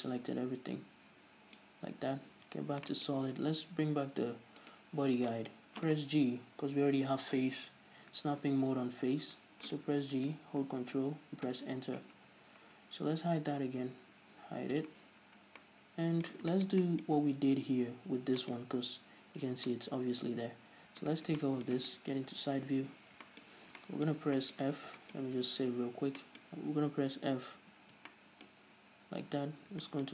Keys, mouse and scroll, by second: 0.3 drag, 2.7 z, 3.2-10.6 shift+middle drag, 5.1 click, 10.6 g, 11.9 ctrl+Return, 12.6 Tab, 15.1-15.5 drag, 15.5-15.9 scroll up 2, 15.9-20.3 middle drag, 20.3 scroll up 2, 20.6 Tab, 20.6-21.3 middle drag, 21.3 alt+right click, 21.7-30.1 middle drag, 22.6 KP_3, 25.1 scroll down 2, 25.8 ctrl+s, 26.9-28.9 scroll up 2, 28.9 f, 29.6 z.